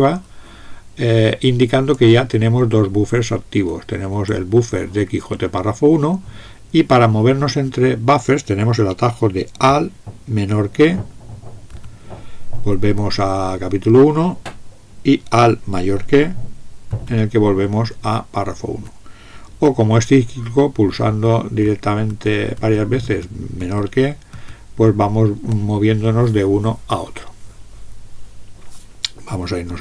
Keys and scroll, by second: 11.7 alt+<, 16.9 alt+>, 21.0 alt+<, 21.6 alt+<, 22.1 alt+<, 22.6 alt+<, 23.0 alt+<, 23.6 alt+<.